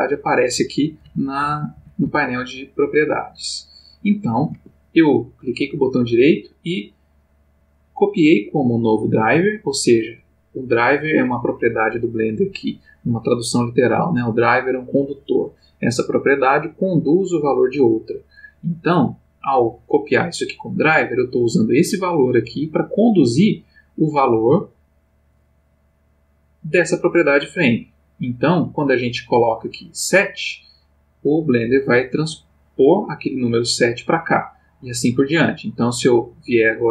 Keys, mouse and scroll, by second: 1.0 n, 2.7-5.1 drag, 4.5 Escape, 5.4 right click, 24.1 click, 25.7 click, 29.4 click, 31.0 click, 35.0 click.